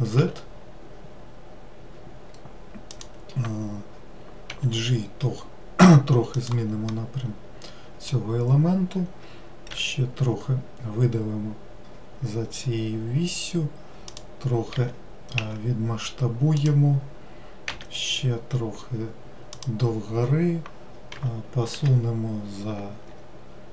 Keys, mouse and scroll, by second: 6.9-9.7 middle drag, 9.7 e.